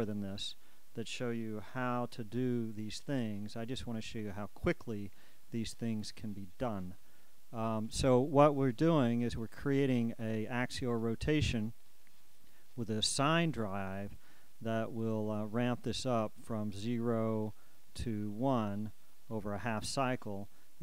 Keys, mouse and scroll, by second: 0.0 click, 1.9 KP_1, 2.5 KP_5, 4.0 scroll up 2, 6.8 click, 8.9 click, 11.1 click, 12.0 click, 12.9 click, 15.2 click, 17.4-19.7 drag.